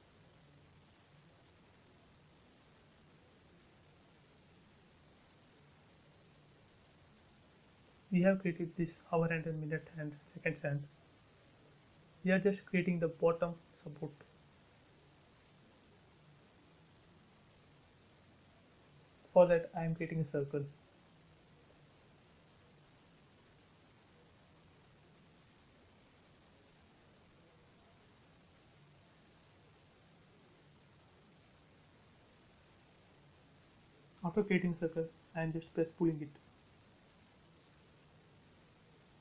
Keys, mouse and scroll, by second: 0.6 click, 1.1 shift+middle click, 2.4-2.8 scroll up 1, 2.9 shift+middle click, 3.3 shift+scroll up 1, 3.4 scroll down 1, 4.2-6.3 shift+middle drag, 6.3 middle click, 7.2-7.8 scroll up 1, 10.2 shift+middle click, 10.9-11.2 scroll up 1, 12.5-14.8 middle drag, 14.8 typing, 15.4 click, 16.4 space, 17.2 middle click, 18.4 c, 20.0 click, 26.4-28.1 typing, 27.9 Return, 28.9 ctrl+z, 29.6 c, 30.2 click, 32.8 click, 32.9 space, 33.6 p, 33.9 click.